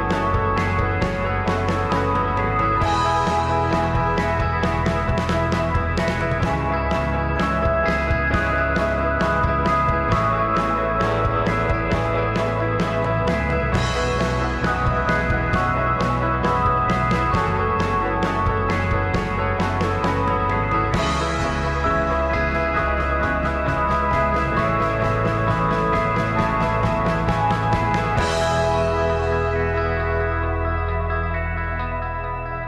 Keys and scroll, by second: 0.3 alt+a, 0.5 alt+a, 0.8 alt+a, 0.9 Tab, 1.3 alt+z, 5.3 g, 5.8 r, 9.6 alt+z, 10.3 Tab, 12.7 Tab, 13.5 2, 14.2 Escape, 15.0 ctrl+z, 16.4 Tab, 17.1 alt+z, 19.0 x, 28.9 g, 29.6 g, 30.9 ctrl+a, 31.5 ctrl+a.